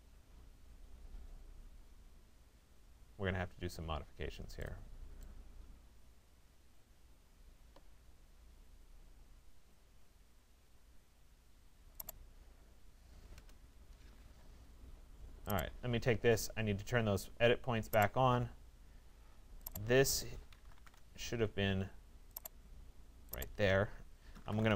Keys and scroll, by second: 12.9 Return, 20.5 Return.